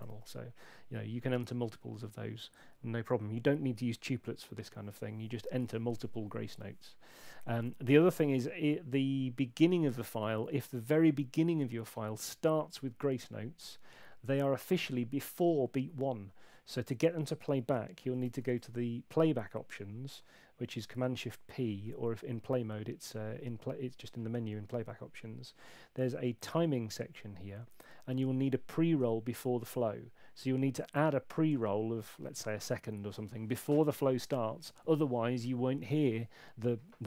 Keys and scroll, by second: 0.0 super+8, 18.3 shift+super+p, 32.3 Left.